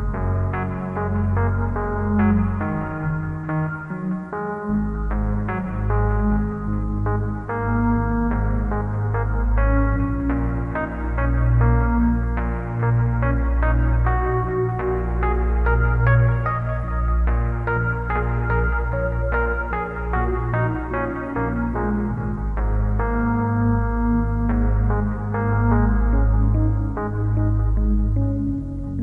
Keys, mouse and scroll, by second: 4.5 click, 8.9 click, 15.0 scroll down 2, 16.3 click, 21.2 g, 24.4 click, 25.1 t, 26.8 click, 27.3 t, 28.4 g.